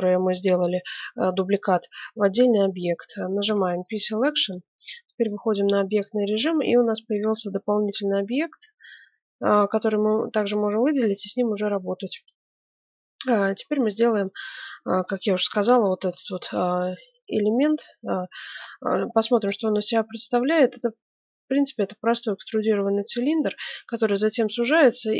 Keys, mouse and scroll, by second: 3.4 p, 4.5 Tab, 5.2 middle click, 5.9-7.6 right drag, 8.6 g, 11.4-14.1 middle drag, 14.5-16.2 middle drag, 15.2 KP_1, 16.3 middle click, 17.2-20.9 middle drag.